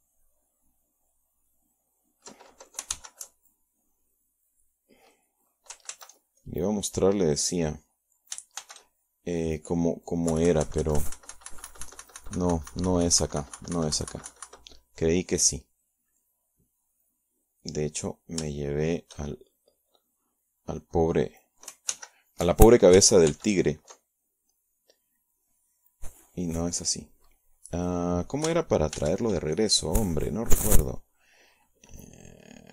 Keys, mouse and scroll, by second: 2.0 ctrl+b, 2.4 ctrl+click, 4.6 shift+b, 4.9 shift+click, 6.3 KP_Subtract, 10.9-17.8 drag, 18.0 alt+h, 19.3 ctrl+b, 21.2 click, 25.0 shift+b, 25.6 shift+click, 30.6 ctrl+shift+b, 32.4 ctrl+s.